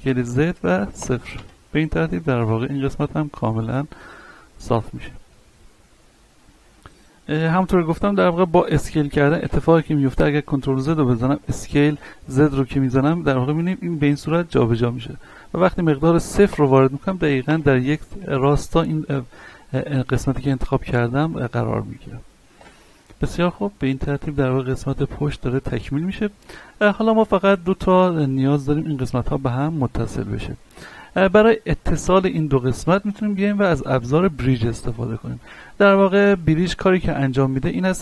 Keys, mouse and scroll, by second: 0.1 z, 1.9 scroll down 1, 2.4 Tab, 2.7 middle click, 3.7-4.2 scroll down 1, 4.7 a, 5.1-7.5 middle drag, 7.5 Tab, 7.9 scroll up 1, 8.3 shift+middle click, 8.9 scroll up 1, 9.5 s, 10.0 right click, 10.3 ctrl+z, 11.3 s, 12.4-13.1 typing, 21.5 middle click, 22.5 Tab, 22.9 scroll down 1, 23.3-26.4 middle drag, 26.7-27.1 scroll up 1, 27.1 Tab, 27.6 middle click, 28.3-29.4 scroll up 1, 29.4 middle click, 30.3 shift+middle click, 31.6 ctrl+Tab, 32.1 click, 32.5 right click, 33.1 shift+right click, 35.5 middle click, 36.2 shift+middle click.